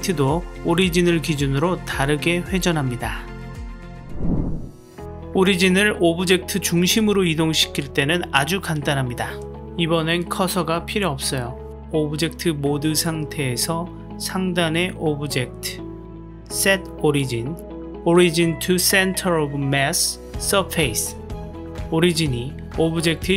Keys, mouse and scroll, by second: 1.4 r, 3.4-3.9 drag, 11.3-13.6 middle drag, 14.8-21.3 drag, 22.1-23.3 middle drag.